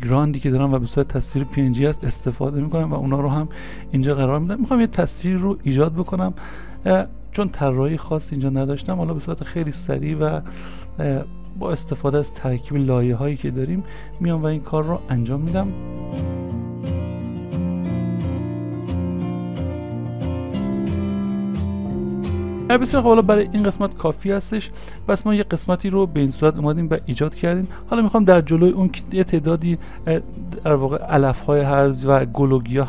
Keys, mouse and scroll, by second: 2.7 s, 15.1 s, 17.0 s, 18.2 s, 20.1 ctrl+d, 24.7 ctrl+a.